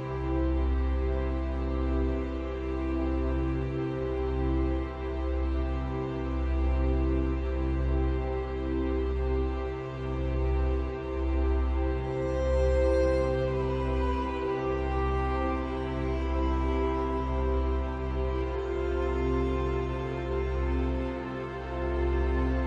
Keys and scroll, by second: 4.1 ctrl+l, 16.7 ctrl+b.